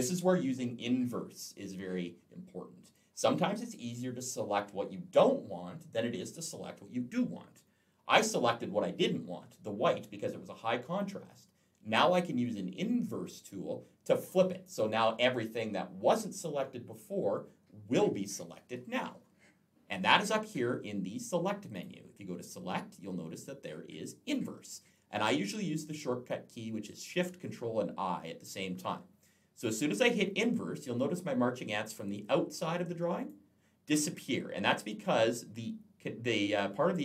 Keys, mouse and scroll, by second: 21.5 click, 33.1 click.